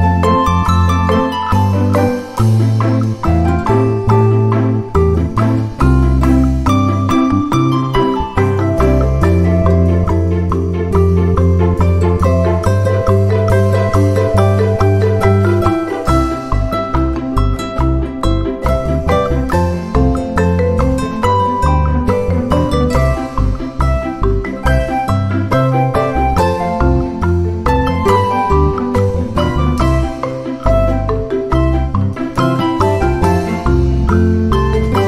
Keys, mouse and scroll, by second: 1.0 click, 1.7 click, 2.5 ctrl+d, 2.8-3.8 ctrl+drag, 4.6 click, 6.0 scroll up 2, 7.0-7.8 ctrl+scroll up 2, 7.9-8.6 ctrl+scroll up 2, 9.1-9.6 ctrl+scroll up 2, 10.1-10.7 ctrl+scroll up 2, 10.7-11.8 ctrl+scroll up 1, 12.4 click, 13.3 ctrl+d, 13.7 ctrl+click, 15.9 shift+click, 16.9 ctrl+shift++, 18.2-19.6 ctrl+drag, 20.1 ctrl+scroll up 2, 20.7 ctrl+click, 22.1 ctrl+click, 23.1 click, 23.5 click, 24.2-25.4 drag, 27.0 click, 28.5 ctrl+d, 29.5 shift+click, 31.2 ctrl++, 32.4 ctrl+click, 33.6 shift+click.